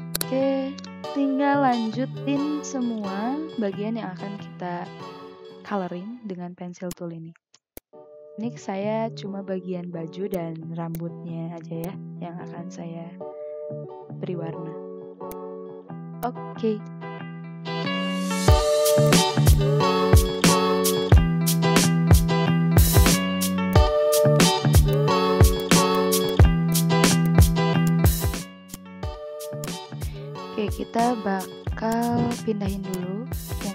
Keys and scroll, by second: 5.4 ctrl+z, 7.6 ctrl+z, 10.0 ctrl+z, 10.7 ctrl+z, 11.5 ctrl+z, 18.3 v, 22.9 ctrl+z, 23.5 ctrl+z, 25.5 v, 27.7 v, 29.3 ctrl+z, 33.5 ctrl+x.